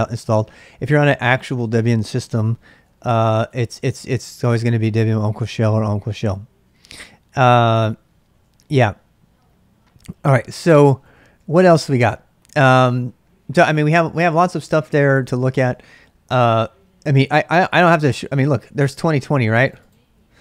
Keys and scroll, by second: 2.5 typing, 10.6-11.9 typing.